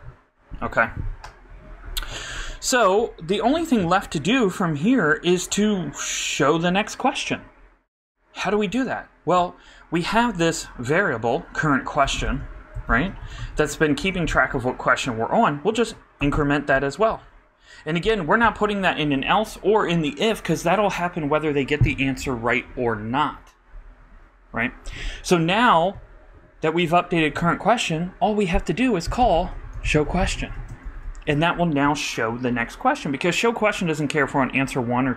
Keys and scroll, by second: 12.8-13.8 typing, 16.2 shift+=, 17.1 shift+;, 29.3-31.3 typing.